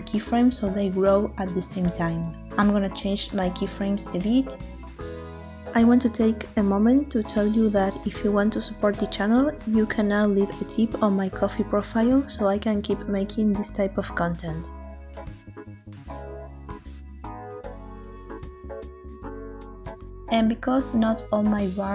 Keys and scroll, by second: 17.0 space.